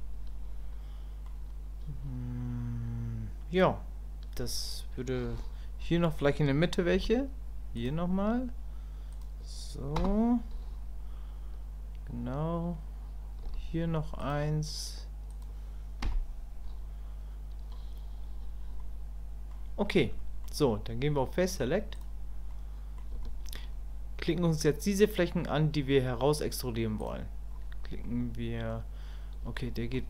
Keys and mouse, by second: 0.0-1.3 middle drag, 18.8 middle click, 20.2 middle click, 22.5 middle click, 23.2 shift+click, 27.0-28.0 drag, 28.0 middle click, 29.6 shift+middle click.